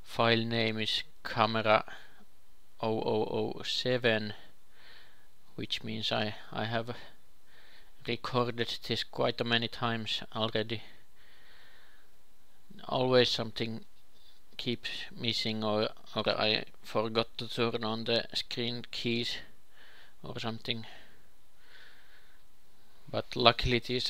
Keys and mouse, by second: 0.5 g, 2.8 click, 6.2-10.9 drag, 9.6 ctrl+c, 10.9 ctrl+v, 12.9-14.0 drag, 14.4 click, 15.0 ctrl+l, 17.4-18.5 drag, 21.0 ctrl+l, 22.7 a.